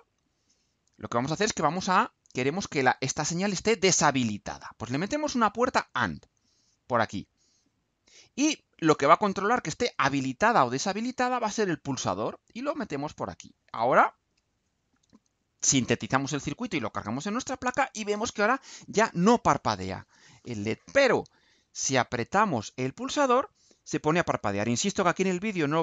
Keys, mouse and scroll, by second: 0.4-1.4 drag, 2.6-5.0 drag, 5.7-6.8 drag, 7.4-8.2 drag, 8.7-10.8 drag, 11.4-12.6 drag, 14.1 ctrl+u.